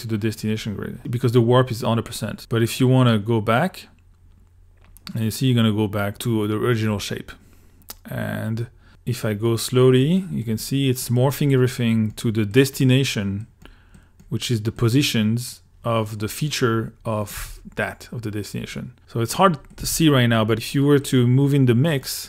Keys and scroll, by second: 17.4 2, 19.8 l.